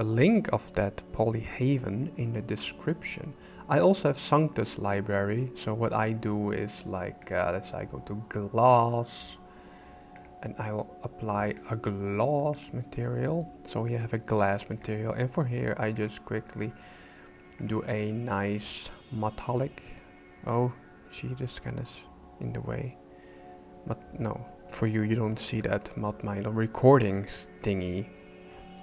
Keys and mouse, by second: 3.7 click, 7.2-8.9 drag, 10.3-11.8 drag, 14.7-15.9 right drag, 15.9-17.7 drag, 18.0-28.8 drag.